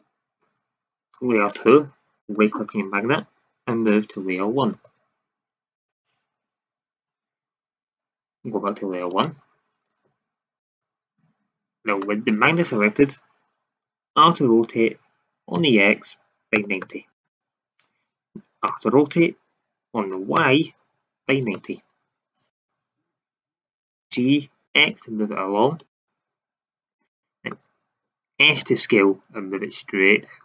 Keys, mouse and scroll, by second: 3.8 m, 9.0 click, 14.0 r, 18.6 r, 24.0 g, 27.1 middle drag, 28.5 s.